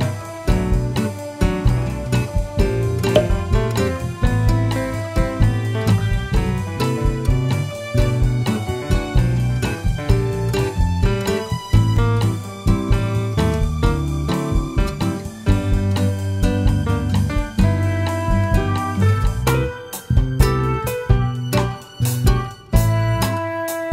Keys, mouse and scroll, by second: 1.7 scroll down 1, 2.3-3.0 middle drag, 3.0 click, 5.2 shift+a, 8.0 scroll down 1, 8.5 s, 9.4 click, 11.1 scroll up 1, 12.1 s, 13.0-14.3 drag, 14.3-14.8 scroll up 2, 14.8-16.0 shift+middle drag, 16.0 s, 18.2 click, 18.5 s, 19.4 click, 20.0 click, 20.2 s, 22.2 click.